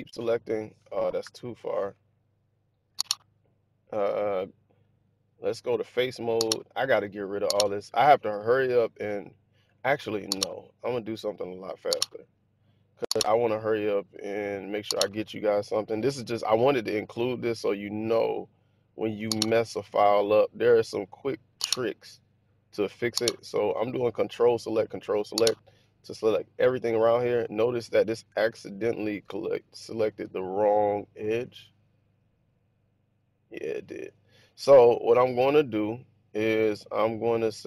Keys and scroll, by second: 1.2 ctrl+-, 17.5 super+z.